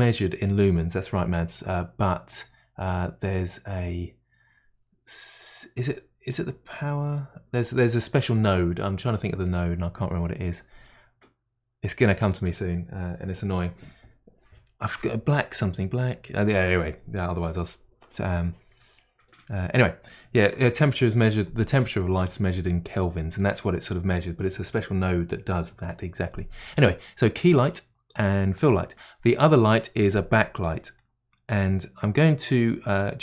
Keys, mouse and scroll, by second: 27.5 click, 28.5 click, 31.0-33.2 middle drag.